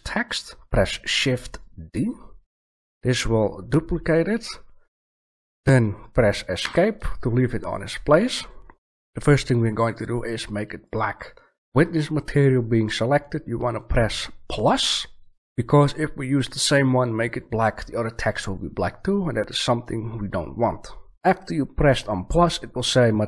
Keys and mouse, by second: 2.4 shift+d, 10.8-11.9 middle drag, 15.4 click, 16.2 drag.